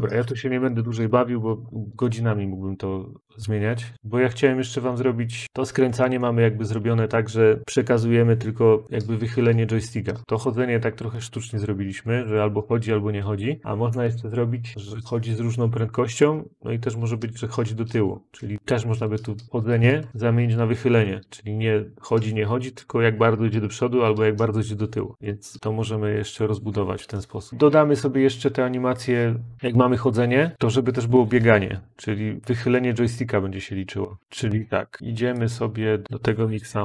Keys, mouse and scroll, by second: 3.7 middle click, 3.9 click, 27.5 click, 30.5 click, 34.2 click, 35.3 click, 36.0 click.